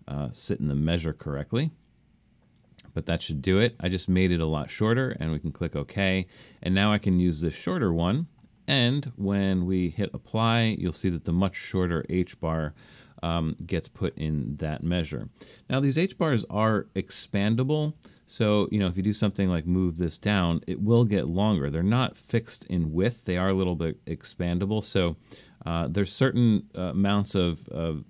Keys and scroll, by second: 17.0 super+-, 18.0 super+-, 19.9 Down, 25.7 super+z.